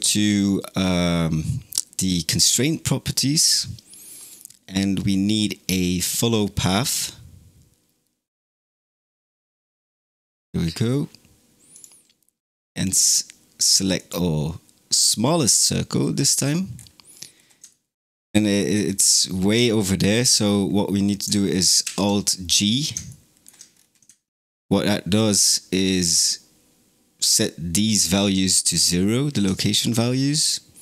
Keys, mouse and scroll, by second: 4.0-7.2 drag, 11.6 click, 16.6-17.6 scroll down 5, 17.6-18.7 shift+middle drag, 18.7-19.5 scroll down 4, 19.5-21.7 shift+middle drag, 21.7 alt+g, 22.5 scroll up 4, 23.0 shift+middle click, 23.6 scroll up 4, 25.0 click, 29.4-30.0 shift+middle drag, 30.0-30.8 scroll up 2.